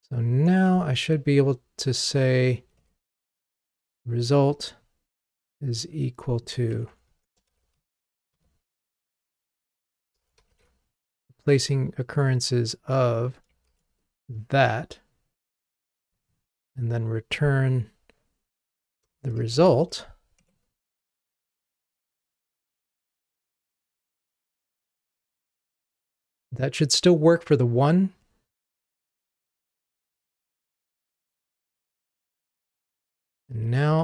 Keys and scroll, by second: 1.0 super+/, 7.5 super+c, 10.6 super+v, 20.5 Escape, 21.4 ctrl+r, 33.5 super+d.